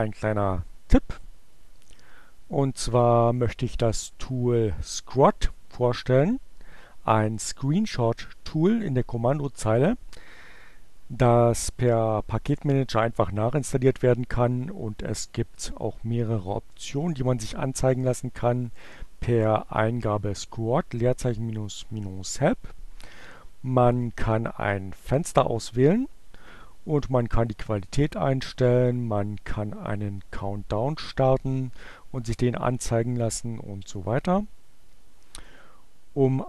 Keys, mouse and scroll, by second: 14.6-18.4 typing, 20.2 Return, 24.1-27.6 drag, 33.0-35.5 drag.